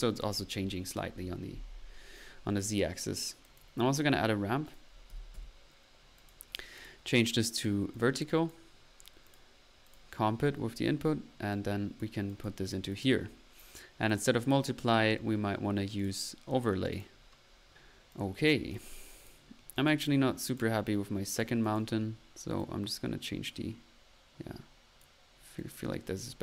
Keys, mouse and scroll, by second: 0.0-0.5 typing, 3.4 click, 4.6 right click, 4.8-5.5 typing, 6.3-7.2 drag, 10.5 middle click, 11.5 click, 12.4 drag, 12.7 drag, 13.0 click, 15.9-16.3 drag, 16.9 click, 17.6 middle click, 18.1 click, 19.4 click, 19.6 middle click, 19.9-20.3 drag, 20.4 click, 21.3 click, 22.0 drag, 22.5 click, 25.5-26.0 drag, 26.0-26.4 middle drag.